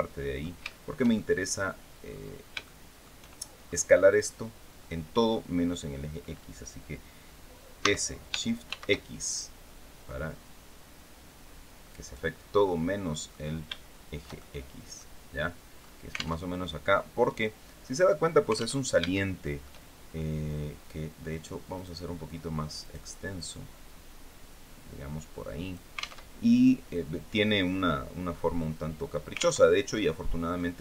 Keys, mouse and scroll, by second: 0.3-1.4 shift+middle drag, 1.7-2.1 scroll up 2, 2.3 shift+middle click, 3.2-3.5 shift+scroll up 3, 7.4 s, 8.3 shift+x, 11.7 click, 12.3 middle click, 13.3-14.8 shift+drag, 15.4-15.8 scroll up 2, 16.0 alt+Tab, 18.5 alt+Tab, 18.8 alt+shift+click, 21.4 right click, 22.5 click, 23.0-25.6 drag, 25.9 alt+Tab, 28.2 middle click, 29.3 alt+Tab, 29.6 alt+middle click, 30.5 scroll down 2.